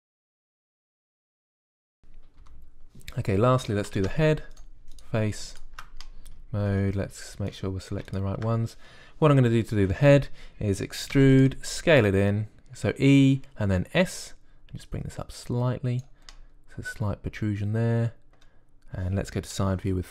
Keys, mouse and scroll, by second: 0.1 click, 1.6 click, 3.3 KP_1, 4.8 ctrl+Tab, 12.0 e, 12.6 s, 15.8-17.2 drag, 17.2 middle click, 17.6-20.1 drag.